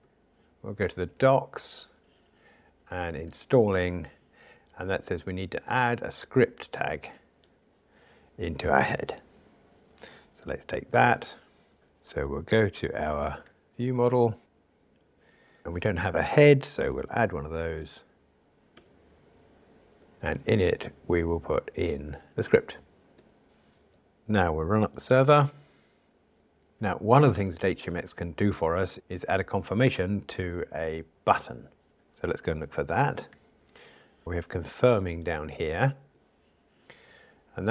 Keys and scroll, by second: 13.5 alt+super+o, 18.9 Return, 22.3 super+v, 33.3 ctrl+alt+o.